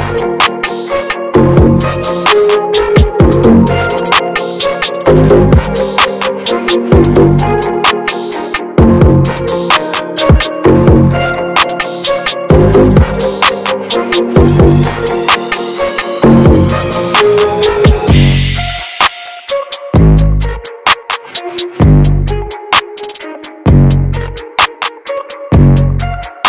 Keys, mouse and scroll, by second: 0.1 click, 1.0 ctrl+z, 1.5-1.9 ctrl+scroll down 1, 2.3 click, 3.2 ctrl+z, 4.0 ctrl+scroll down 1, 4.6-7.2 drag, 7.2 ctrl+z, 7.7-9.1 ctrl+drag, 9.1 ctrl+z, 9.6-11.1 drag, 11.1 ctrl+z, 11.5 ctrl+scroll down 1, 12.2-13.3 drag, 13.3 ctrl+z, 14.4-14.7 ctrl+scroll down 1, 15.1-16.4 drag, 16.4 ctrl+z, 16.8 ctrl+scroll down 1, 17.3 click, 18.2 ctrl+z, 18.9 ctrl+scroll down 1, 19.3-20.7 drag, 20.7 ctrl+z, 21.2 shift+f, 22.8-24.9 drag, 24.9 middle click, 25.5 ctrl+z, 25.8 middle click, 26.3-26.4 ctrl+drag.